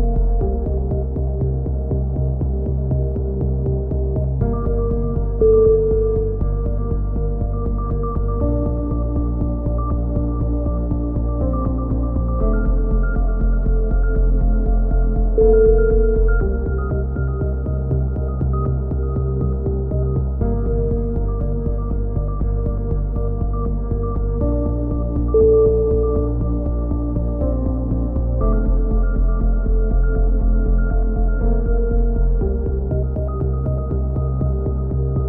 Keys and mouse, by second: 3.2 a, 3.4 middle click, 4.7 z, 5.1 click, 5.3 click, 5.7 click, 6.3 middle click, 6.5 middle click, 6.8 middle click, 8.2-9.4 middle drag, 9.4-10.5 drag, 10.4 x, 10.7 right click, 11.4-13.7 right drag, 12.5 f, 12.7 z, 13.7 f, 13.8 z, 15.1 f, 15.3 a, 15.9 click, 18.5-19.9 drag, 24.2 KP_7, 24.7 click, 25.4 z, 25.7 z, 25.8 click, 27.8 click, 28.0 middle click, 28.3 right click, 28.9 s, 32.2 a, 32.9 KP_3, 33.6 ctrl+z, 34.2 s.